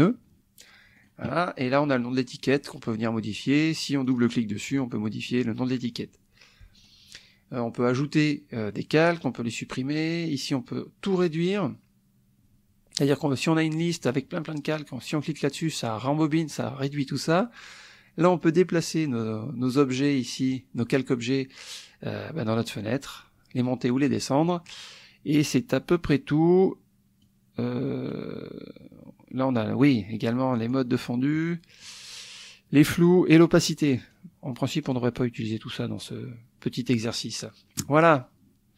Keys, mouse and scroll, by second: 1.0 click, 4.0 click, 5.3 click, 6.8 click, 27.2 click, 34.2 click.